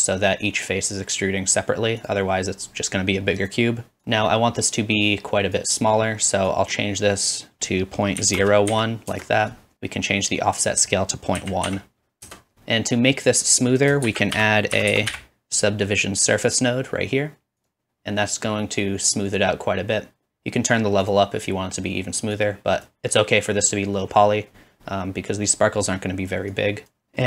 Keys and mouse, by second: 0.0-2.0 drag, 0.0 typing, 2.0 middle click, 2.1-3.4 drag, 3.4 middle click, 3.5 click, 4.0-7.0 middle drag, 7.0-12.5 drag, 14.0 shift+a, 18.9-23.0 drag, 18.9 typing, 21.1-23.0 middle drag, 21.1-23.0 right drag.